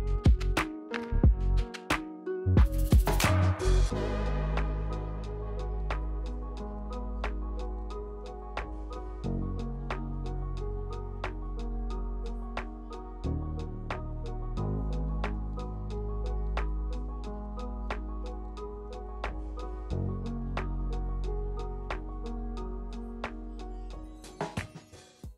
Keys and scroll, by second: 0.6 Return, 2.0 Return, 4.8 w, 6.2 b, 11.2 ctrl+1.